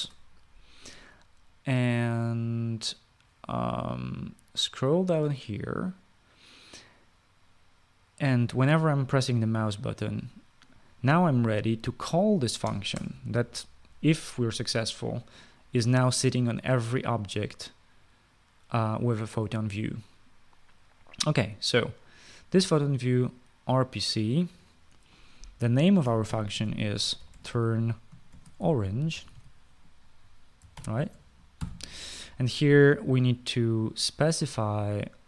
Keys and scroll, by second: 13.4 BackSpace, 13.7 BackSpace, 27.0-32.0 typing.